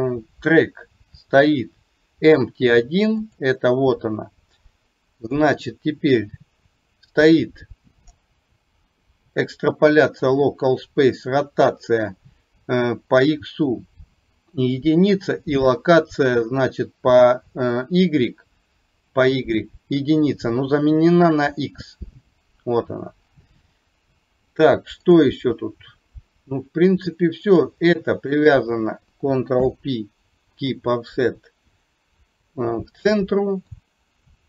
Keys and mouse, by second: 3.2 click, 5.2 click, 27.6 click, 28.4 shift+click, 29.6 ctrl+p, 33.7-34.4 drag.